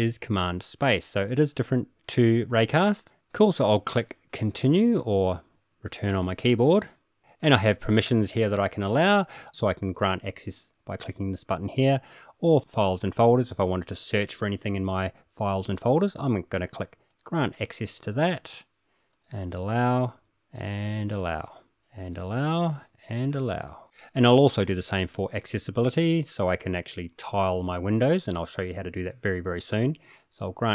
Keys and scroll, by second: 3.4 typing, 6.2 Return, 7.0 typing, 10.2 typing, 19.0-19.5 typing, 22.5 typing, 25.7 typing.